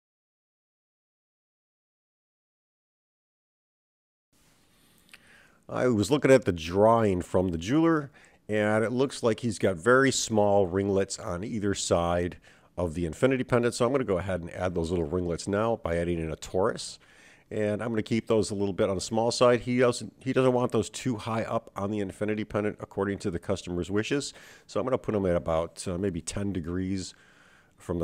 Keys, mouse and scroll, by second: 5.8 middle click, 5.8 scroll down 3, 5.8 shift+a, 14.3-16.7 drag, 18.6 g, 20.8 KP_7, 22.5 g, 25.6 s.